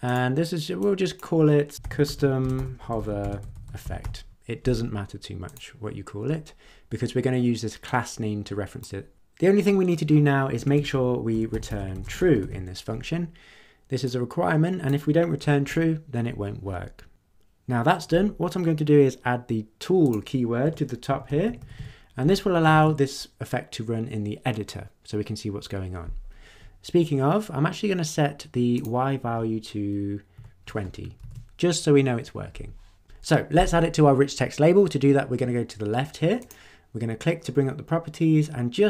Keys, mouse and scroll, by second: 0.0 click, 0.7-1.3 drag, 1.5-4.5 typing, 5.4 click, 7.8-9.0 drag, 10.6 Return, 10.7-13.0 typing, 14.0-15.1 drag, 15.4 BackSpace, 20.0 click, 20.6 Return, 21.0-22.2 typing, 22.7 ctrl+s, 28.7 click, 30.3 2, 31.2 ctrl+s, 36.4 click.